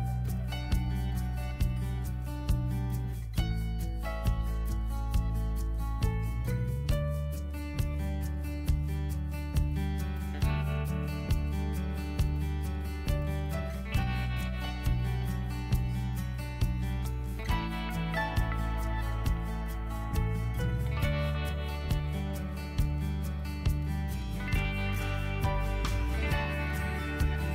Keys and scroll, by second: 2.7 Return, 4.4-6.2 typing, 7.4-9.4 typing, 7.8 Caps_Lock, 10.0 ctrl+t, 12.1 Right, 13.5 Up, 13.7 Right, 14.1 Return, 18.9-25.5 typing, 23.0 Caps_Lock.